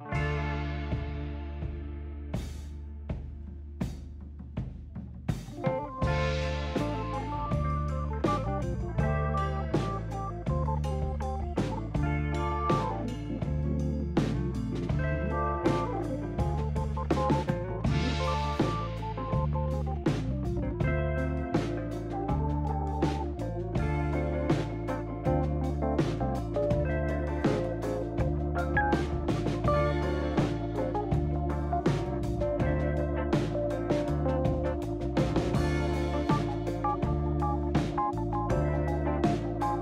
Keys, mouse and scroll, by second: 0.8 shift+s, 6.0 shift+s, 8.4 shift+s, 9.9 shift+s, 11.4 shift+s, 12.1 shift+s, 13.2 shift+s, 23.1 shift+s, 24.2 shift+s, 27.8 shift+s, 31.2 shift+s, 32.7 shift+s, 34.7 shift+s, 36.1 shift+s, 38.1 shift+s.